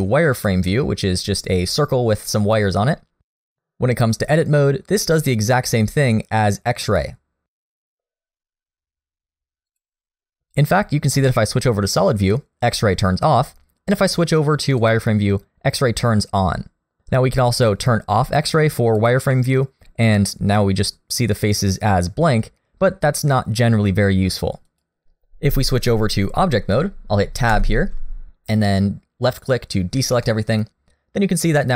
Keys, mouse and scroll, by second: 0.4 click, 3.8 middle click, 4.3-4.7 scroll up 1, 4.7 middle click, 6.6 click, 9.7 click, 14.8 click, 16.9 click, 18.3 click, 19.0 click, 19.3 middle click, 24.7 click, 27.5 Tab, 29.3 click, 29.9-30.3 scroll down 1, 30.3 middle click.